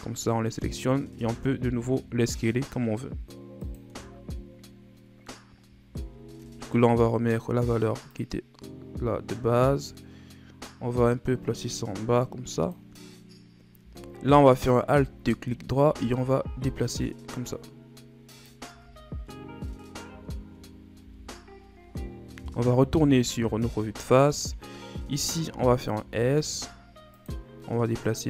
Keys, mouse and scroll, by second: 1.1 s, 3.8 Tab, 4.0 scroll down 4, 4.3-5.4 middle drag, 5.4-5.9 scroll up 1, 5.9 ctrl+z, 6.3 ctrl+z, 7.2-8.1 scroll up 1, 8.1-11.1 drag, 14.6 alt+right click, 15.8 s, 18.6 Tab, 19.1 scroll down 1, 19.3-20.3 middle drag, 20.3-20.9 shift+scroll up 3, 20.9 Tab, 23.2 KP_1, 24.1-25.1 shift+scroll up 5, 25.1 alt+right click, 25.9 s, 27.9-28.2 drag.